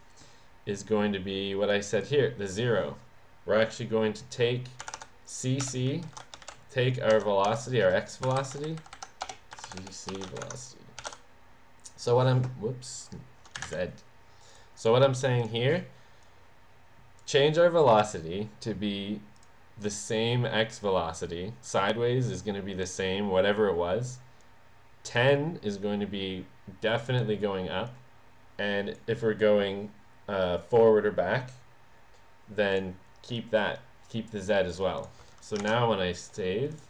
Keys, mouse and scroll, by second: 1.7 click, 4.8-7.4 typing, 8.2 Escape, 8.3 Right, 8.6 Right, 9.2-11.6 typing, 12.0 click, 12.9 click, 13.6 Delete, 15.4 click, 16.2 click, 19.3 click, 19.9-21.1 drag, 24.4 click, 27.9-29.0 drag, 32.7-34.7 drag, 34.9 click, 36.7 click.